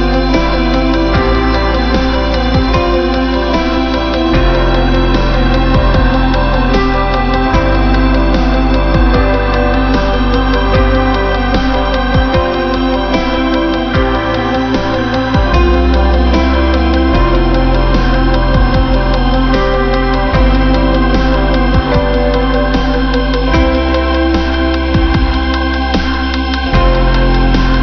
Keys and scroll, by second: 2.2 ctrl+-, 3.0 ctrl+=.